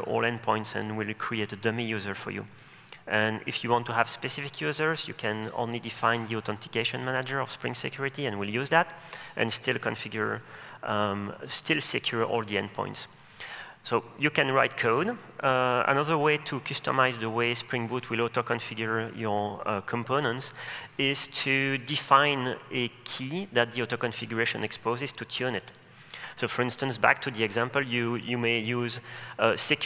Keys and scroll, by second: 18.7 ctrl+space.